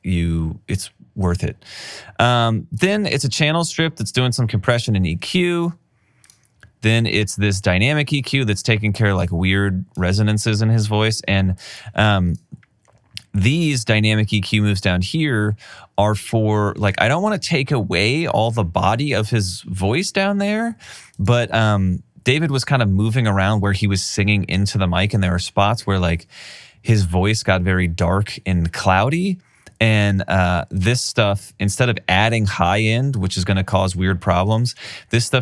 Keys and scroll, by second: 6.5 alt+super+w.